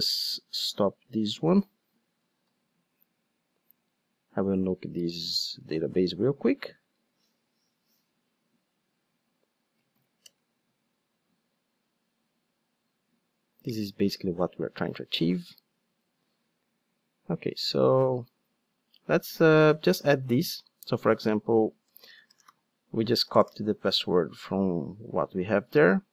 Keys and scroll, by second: 0.0 super+r, 14.7 super+r, 21.4 super+a, 22.5 super+v.